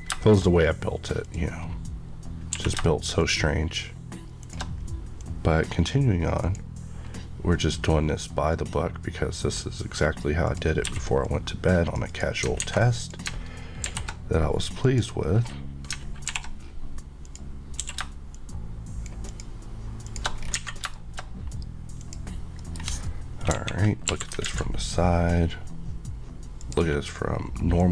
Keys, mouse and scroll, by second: 0.2 middle click, 0.2 middle click, 0.5 scroll, 0.6-1.2 scroll up 1, 1.2 click, 1.6 scroll, 1.6-2.1 scroll up 1, 2.1 scroll down 1, 2.5 q, 3.2 click, 4.4 shift+Left, 5.2 click, 10.8 q, 11.2 click, 12.0 click, 12.1 Left, 12.4 alt+click, 12.6 alt+a, 13.0 click, 13.8 alt+m, 14.8 click, 16.2 alt+m, 17.2 click, 17.8 q, 18.3 shift+click, 19.3 shift+click, 20.0 click, 20.4 scroll down 1, 20.7 a, 20.9 middle click, 22.0 click, 22.6 middle click, 23.5 KP_5, 24.4 alt+z, 24.8 scroll up 1, 26.6 click, 27.7 click.